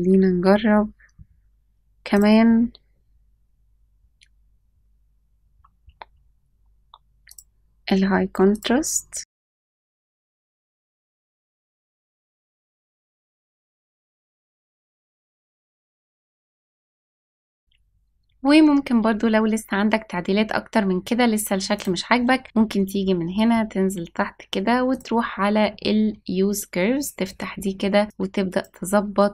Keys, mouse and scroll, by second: 2.0 click, 2.4 scroll down 2, 5.5-6.6 scroll down 4, 7.2-8.6 drag, 10.0 click, 10.6 click, 10.7 scroll down 1, 11.1 scroll up 1, 11.1 click, 11.7 e, 11.7 z, 12.1 g, 13.8-15.5 drag, 15.5 click, 16.3 l, 17.6-18.6 scroll down 3, 21.7 click, 22.1-23.6 scroll down 9, 25.1 click, 25.6-26.4 scroll down 3, 26.9 click, 27.2-28.0 scroll down 4, 28.0 click.